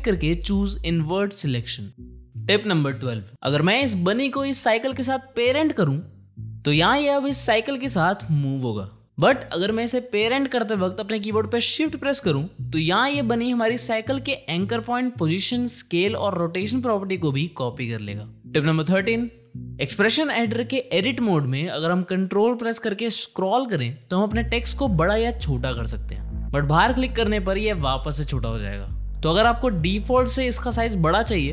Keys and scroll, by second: 8.4 ctrl+z.